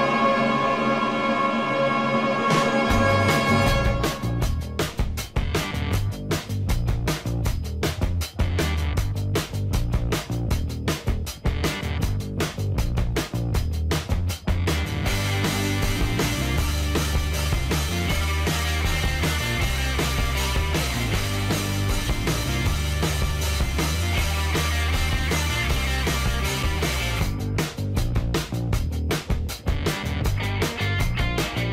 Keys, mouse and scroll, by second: 5.7-10.5 middle drag, 10.5 click, 14.8 click, 17.1 shift+click, 19.0 shift+click, 20.1 middle click, 20.8 g, 21.6 z, 29.6 click, 30.3-31.7 middle drag.